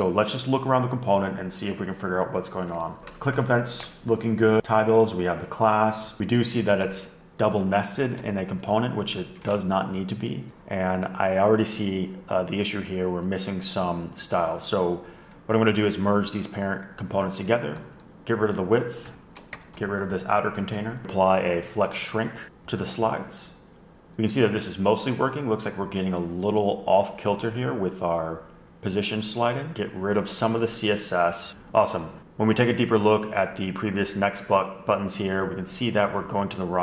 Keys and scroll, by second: 3.5 Return, 3.7 Return, 4.3 Return, 4.5 Return, 4.6 Return, 4.6 Escape, 6.3 alt+shift+Right, 7.5 alt+Left, 7.8 alt+shift+Right, 7.9 alt+shift+Right, 9.4 Down, 9.9 Left, 10.5 Return, 10.5 ⟲, 18.0 alt+Down, 18.6 Down, 19.3 alt+Right, 19.6 alt+shift+Left, 20.0 super+f, 20.2 shift+Return, 20.7 Escape, 21.0 Left, 22.4 typing, 29.7 super+Up, 31.0 super+x, 31.3 super+x.